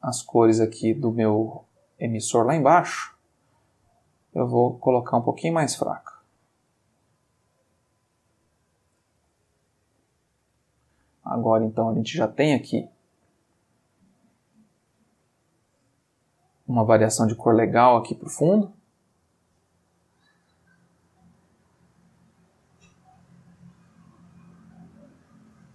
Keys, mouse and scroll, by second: 1.3 click, 3.3 click, 4.8-9.1 drag, 9.5-15.3 ctrl+middle drag, 16.2 click, 17.7 click, 20.0-21.1 drag, 21.4-23.3 drag, 23.5-25.7 drag.